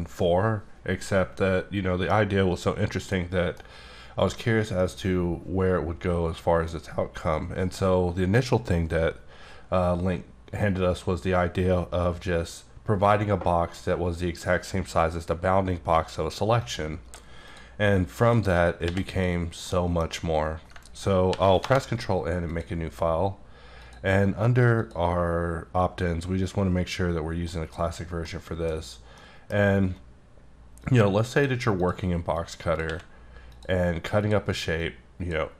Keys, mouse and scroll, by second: 3.2 middle click, 4.3-4.8 scroll down 1, 4.8 middle click, 16.6 click, 18.2 shift+click, 18.8 x, 19.1 click, 19.6 middle click, 20.0 scroll down 1, 20.1 scroll up 1, 20.7-21.3 ctrl+scroll up 1, 21.3 ctrl+n, 21.6 Return, 22.5 click, 23.8 click, 24.8 click, 27.5 middle click, 27.9 scroll down 1, 28.2 middle click, 28.7 scroll down 1, 28.8-29.1 scroll up 2, 29.1 middle click, 29.5-29.8 scroll down 1, 30.8 click, 31.8 click, 32.3 click, 33.5 click, 33.8-34.2 scroll up 2, 34.2 click, 34.8 click.